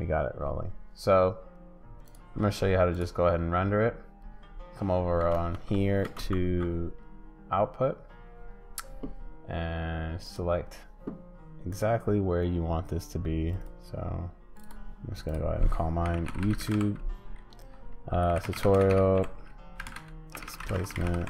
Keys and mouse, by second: 2.1 click, 6.2 ctrl+space, 10.2 click.